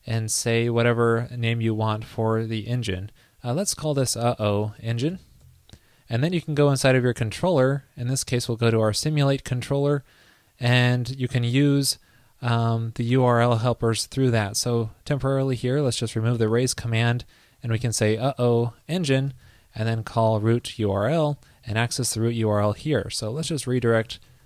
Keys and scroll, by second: 5.5 super+s, 12.7 shift+super+Right, 22.5 super+Left.